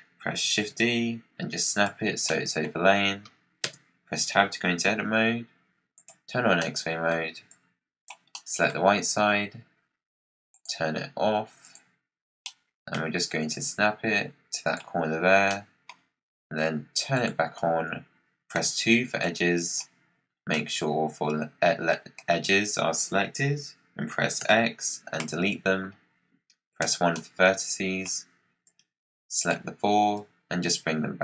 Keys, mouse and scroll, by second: 0.2-0.5 scroll up 2, 0.5 shift+d, 2.2-3.5 middle drag, 2.7-3.5 scroll down 5, 3.5 Tab, 5.8 click, 6.5 middle click, 7.4 click, 8.2 middle click, 8.7-9.1 scroll down 5, 10.4-12.0 drag, 12.0-12.3 scroll up 1, 12.3-13.4 middle drag, 13.4 click, 15.2 scroll up 3, 15.4-17.1 middle drag, 17.1 click, 17.4-17.8 scroll up 4, 18.5 2, 19.1 click, 20.3 scroll up 2, 20.4-22.3 middle drag, 22.3-24.3 scroll up 1, 24.3 x, 25.8-26.7 scroll down 3, 26.7 1, 27.1-28.6 middle drag, 28.6 click, 30.1 click.